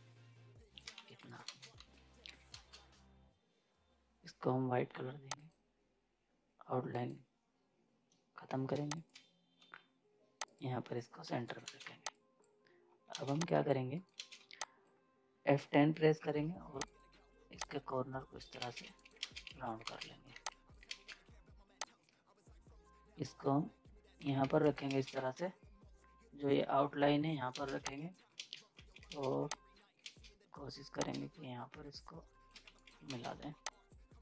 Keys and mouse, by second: 0.9 z, 1.0 right click, 1.5 space, 1.7 z, 2.5 ctrl+space, 5.3 click, 6.9 right click, 8.9 click, 9.6 c, 10.5 click, 11.3 z, 11.4 right click, 11.4 right click, 11.8 z, 12.1 click, 13.1 ctrl+space, 13.3 z, 13.4 click, 13.9 right click, 14.1 space, 14.4 z, 14.6 click, 16.2 F10, 16.8 click, 18.6 ctrl+space, 18.8 z, 18.9 right click, 19.2 space, 19.5 z, 19.9 ctrl+space, 20.3 z, 20.5 click, 20.9 ctrl+space, 21.8-24.4 drag, 24.4 z, 24.5 right click, 24.6 right click, 24.9 ctrl+space, 25.1 z, 27.5 ctrl+space, 27.8-30.0 typing, 27.9 click, 28.4 ctrl+space, 28.9 right click, 29.5 click, 31.0-32.6 drag, 32.6 z, 32.7 right click, 33.1 ctrl+space, 33.4 z, 33.7 click.